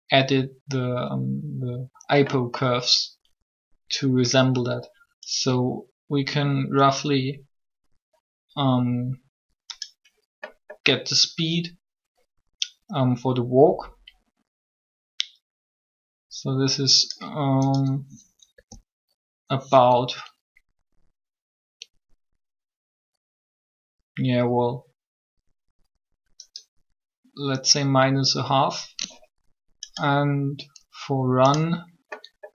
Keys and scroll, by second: 18.5 g.